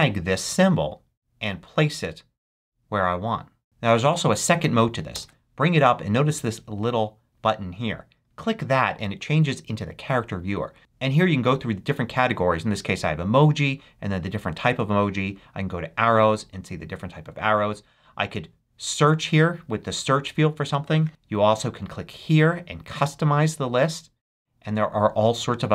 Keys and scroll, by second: 5.1 ctrl+super+space.